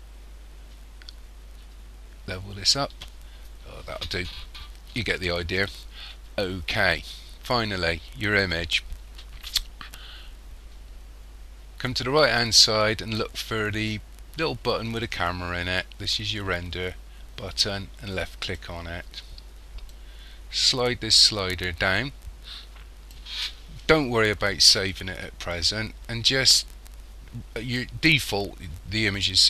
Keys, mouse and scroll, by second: 18.1 click, 19.9 click.